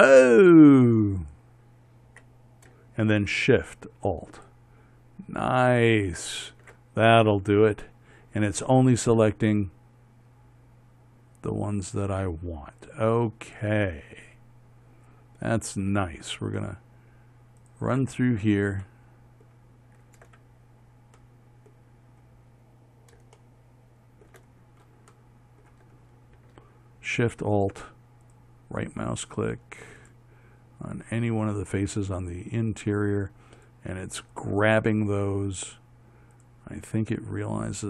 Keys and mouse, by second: 7.5-12.3 middle drag, 12.3-18.8 drag, 19.5-22.0 alt+shift+drag, 25.1 middle click.